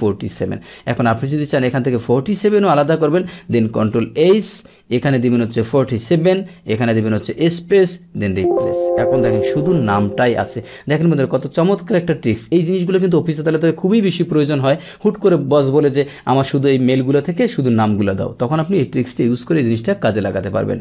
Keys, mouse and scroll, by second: 1.0 click, 3.6 ctrl+h, 5.0-5.4 drag, 6.9 click, 8.1 click, 9.2 click, 10.2 click, 10.8 click, 11.5 click.